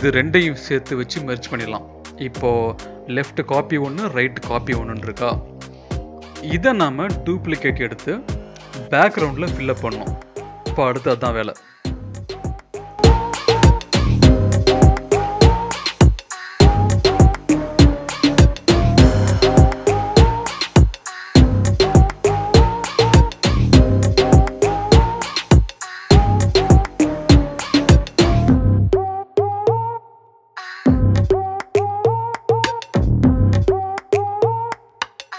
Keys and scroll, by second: 4.5 ctrl+e, 22.2 ctrl+t, 26.2 ctrl+[, 26.7 ctrl+t, 29.5 ctrl+z, 29.6 ctrl+e, 29.8 ctrl+t, 31.9 ctrl+z, 34.5 ctrl+z, 34.8 ctrl+t.